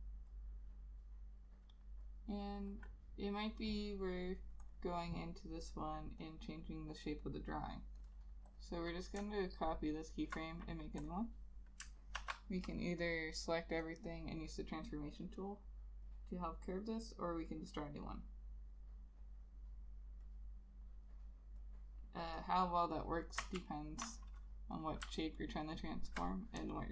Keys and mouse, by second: 9.5 alt+click, 23.7 ctrl+z, 25.5 alt+click.